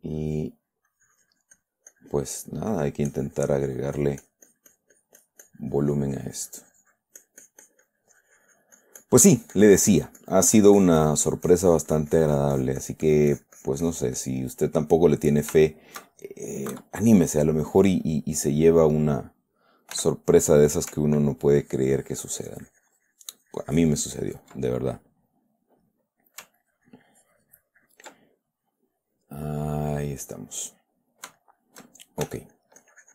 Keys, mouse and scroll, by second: 0.5 middle click, 1.3-3.0 drag, 3.1-15.9 middle drag, 3.5-14.5 drag, 15.9 shift+click, 17.1 KP_Subtract, 17.7 middle click, 18.5-19.9 middle drag, 20.3 f, 20.9 click, 21.8-25.0 ctrl+drag, 25.0 ctrl+middle click, 25.7 middle click, 26.8 ctrl+middle click, 26.9-28.5 ctrl+drag, 28.5-30.1 ctrl+middle drag, 30.2 ctrl+middle click, 31.7 shift+middle click, 32.1 shift+click, 32.6 shift+f, 32.9 click.